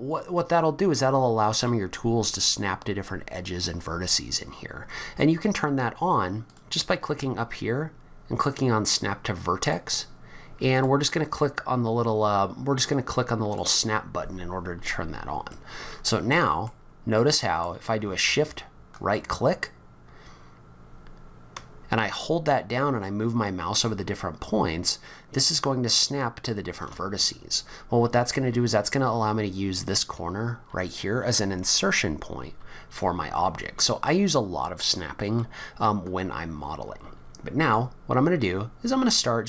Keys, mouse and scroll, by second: 6.5 click, 13.5 click, 15.5 middle click, 17.2 middle click, 18.9 shift+right click, 27.5-28.7 scroll up 6, 32.8-34.0 scroll down 7, 37.8-39.3 scroll up 4.